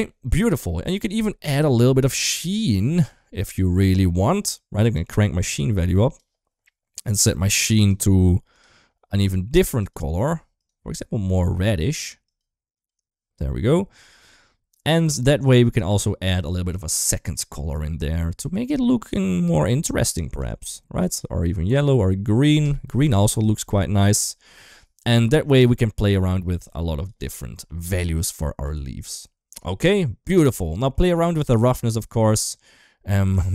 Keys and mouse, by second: 0.5 middle click, 1.3 middle click, 2.7-3.2 middle drag, 3.3 middle click, 4.7-6.0 drag, 7.6 click, 14.5-18.5 drag, 18.8 click, 25.3-26.9 drag, 27.2 middle click, 28.9 ctrl+s, 30.5 middle click, 31.3-33.1 drag.